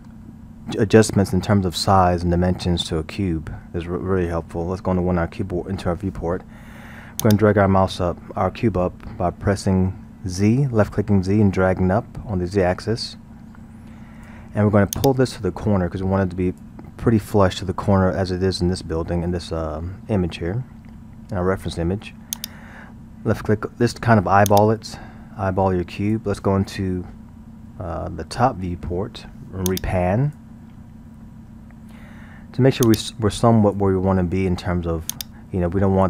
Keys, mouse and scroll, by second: 5.0 KP_1, 7.2-10.3 drag, 15.0-17.2 drag, 17.2-20.3 middle drag, 22.4-27.6 drag, 27.7 KP_7, 28.3 scroll, 29.7 click, 30.7 scroll, 32.9-36.0 drag.